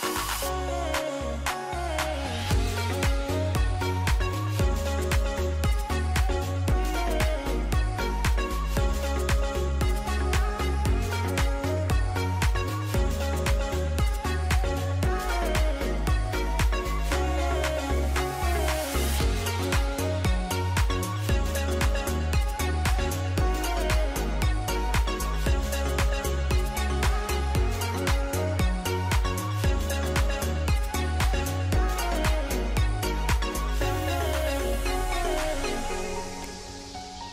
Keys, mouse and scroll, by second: 12.3 alt+].